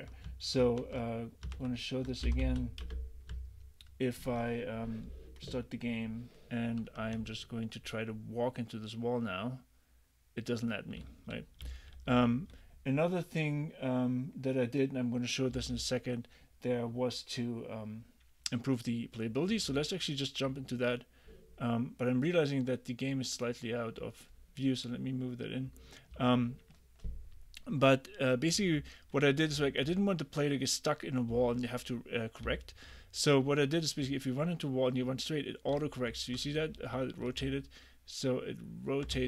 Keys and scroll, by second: 0.8 super+`, 2.1-3.0 typing, 7.2 w, 11.0 d, 12.2 s, 15.6 d, 26.2 a, 28.6 d, 29.6 w, 32.5 s, 34.1 w, 36.1 w, 36.6 a, 37.5 w.